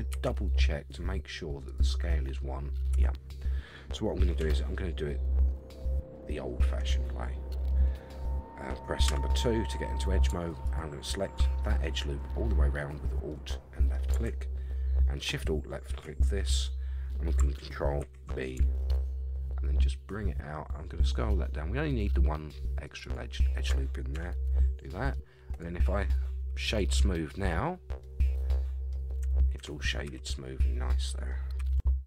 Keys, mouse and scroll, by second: 0.1 n, 1.7 click, 2.9 n, 4.4 Tab, 5.5-7.7 middle drag, 9.0 2, 10.6 alt+click, 13.3 middle click, 15.3 alt+shift+click, 16.4 middle click, 18.0 ctrl+b, 23.0 shift+right click, 24.1 Tab, 24.8 middle click, 25.5 right click, 27.7 scroll down 3, 28.0-28.9 middle drag, 29.2 Tab, 29.6 Tab, 30.0 a, 30.4-30.9 scroll down 2, 30.7-31.3 middle drag, 31.6 a, 31.7 a, 31.9-32.0 middle drag.